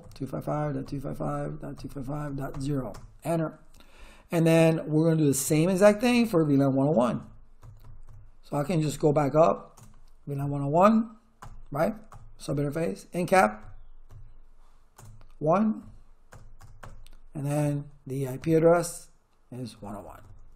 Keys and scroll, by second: 0.0-3.0 typing, 5.4 Return, 7.2 Up, 8.8 Down, 9.7 BackSpace, 10.4 1, 11.4 Return, 13.3 Up, 15.0 BackSpace, 15.8 1, 16.3 Return, 17.6 Up, 19.7 Left.